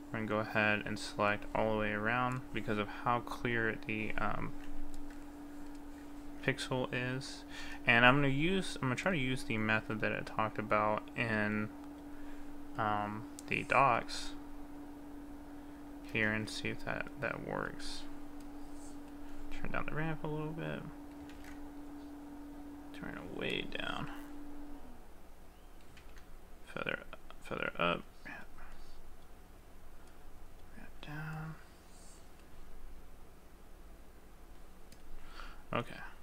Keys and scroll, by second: 7.7 ctrl+z, 16.3 ctrl+z, 26.1 ctrl+z.